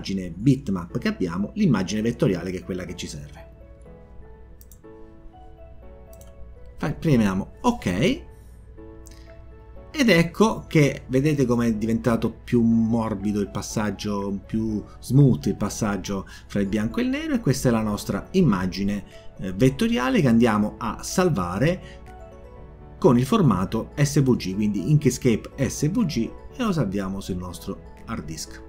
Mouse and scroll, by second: 6.8 click, 8.9 click, 19.6 click, 20.1 click, 23.0 click, 27.8 click.